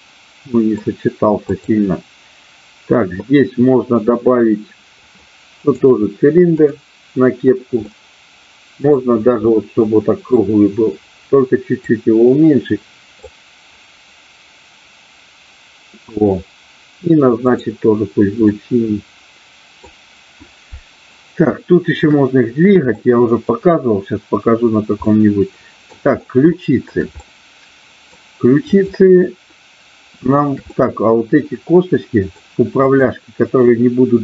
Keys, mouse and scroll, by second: 1.5-2.5 drag, 5.0 click, 6.5 click, 8.0-9.0 middle drag, 9.5 middle click, 11.7-15.1 drag, 17.3 click, 18.5-19.8 middle drag, 23.0 shift+middle click, 25.1 middle click, 26.5 shift+middle click, 27.2-28.2 middle drag, 28.7 click, 30.7-32.3 middle drag, 32.8-33.8 drag.